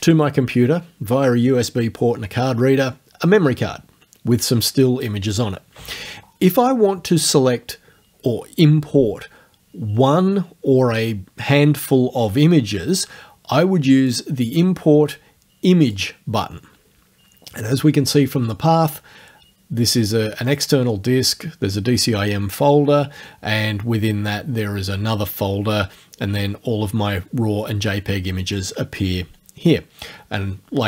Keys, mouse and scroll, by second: 14.0 click, 15.9 click.